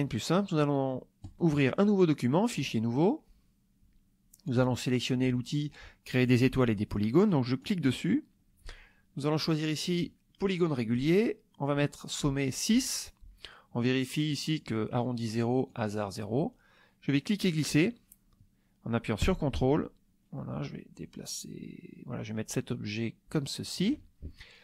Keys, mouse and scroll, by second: 1.2 click, 2.6 click, 7.6 click, 14.3 click, 15.7 click, 17.1-23.9 drag.